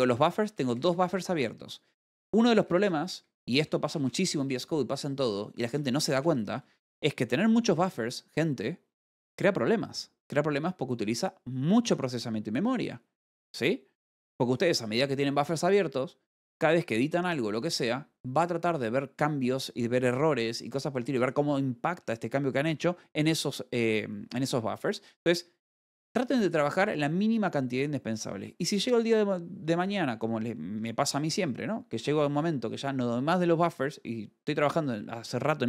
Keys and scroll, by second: 0.1 e, 3.4 l, 7.2 g.